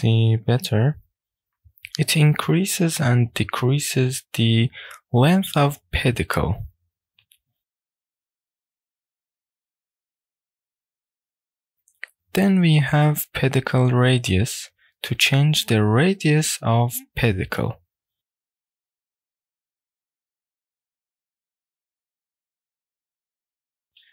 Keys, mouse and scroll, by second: 1.9-11.7 drag, 11.7 shift+middle click, 11.7-13.0 scroll down 1, 19.3-24.1 drag.